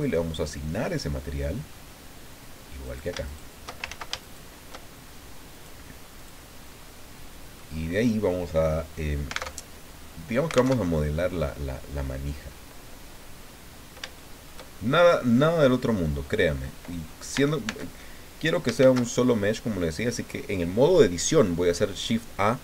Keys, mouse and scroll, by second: 0.4-0.7 scroll down 1, 0.9-1.9 drag, 2.8 click, 3.1 shift+right click, 3.2 shift+right click, 3.9 ctrl+shift+z, 4.2 ctrl+shift+right click, 5.5 right click, 6.1 right click, 6.6 scroll down 2, 6.8 right click, 9.5 alt+Tab, 10.7 alt+Tab, 13.3-13.6 scroll up 2, 14.1 shift+click, 14.7-16.0 shift+scroll down 2, 16.0-16.4 scroll down 1, 17.3 Tab, 18.8 shift+a.